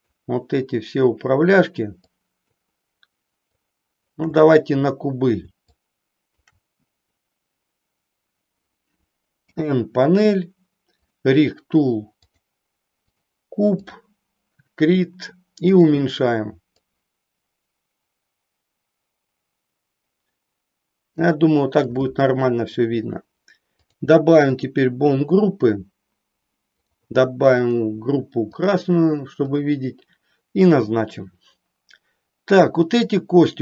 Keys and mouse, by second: 2.1 shift+click, 3.6 shift+click, 5.7 shift+click, 9.3 n, 12.3-13.3 drag, 14.1 click, 15.7 click, 16.7-21.1 drag, 23.8 click, 24.6 click, 26.8 click, 27.7-28.8 drag, 29.4 click.